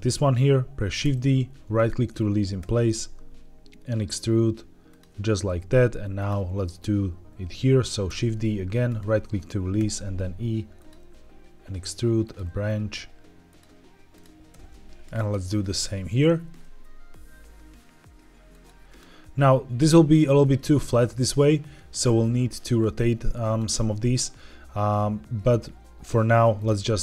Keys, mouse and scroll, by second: 0.9 shift+d, 1.7 right click, 2.5 e, 4.8 click, 6.1 click, 8.0 shift+d, 8.8 right click, 9.7 e, 10.7 click, 10.9 e, 12.1 click, 12.4 e, 13.4 click, 14.0 click, 14.4 shift+d, 15.0 right click, 16.2 e, 18.4 click, 20.7-22.4 middle drag, 26.5 click.